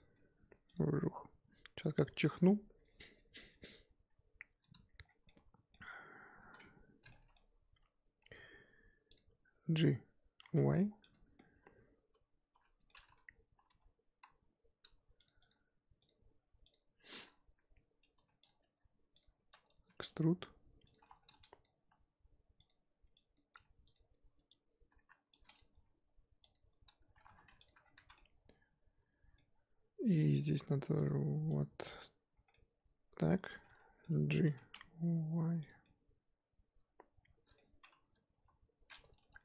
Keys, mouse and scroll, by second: 0.1 g, 1.0-3.6 scroll down 3, 3.6-5.0 scroll up 2, 5.0 scroll down 4, 5.2 middle click, 5.9-6.4 scroll up 1, 6.4 a, 7.1 middle click, 7.4-9.1 scroll up 2, 9.1 click, 10.5 g, 11.3-13.7 middle drag, 13.7 KP_3, 14.1 KP_1, 18.1 2, 18.4 click, 19.2 ctrl+click, 19.9 e, 21.0 1, 21.6 click, 21.8 g, 23.3 click, 23.5 g, 25.5 click, 25.8 g, 27.3 2, 27.6 alt+click, 27.8 scroll down 1, 27.9 z, 28.1-31.0 middle drag, 31.0 click, 31.5 drag, 31.8 click, 32.5-34.6 middle drag, 34.6 g, 35.9-38.3 middle drag, 38.3 KP_1.